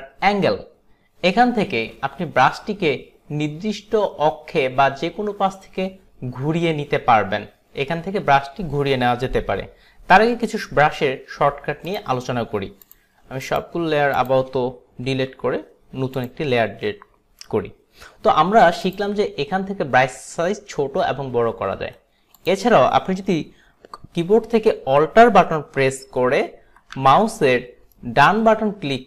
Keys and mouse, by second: 13.5 shift+click, 14.3 shift+click, 15.2 Delete, 18.9 click, 22.4 click, 28.0 alt+right click.